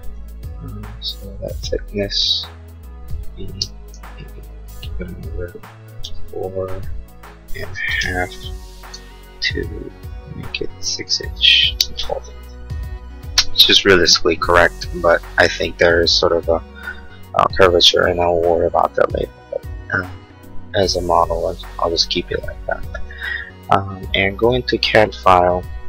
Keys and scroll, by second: 3.4 space, 3.9 p, 5.8 4, 6.0 Return, 7.3-8.2 typing, 10.7 Escape, 11.5 space, 12.0 Escape.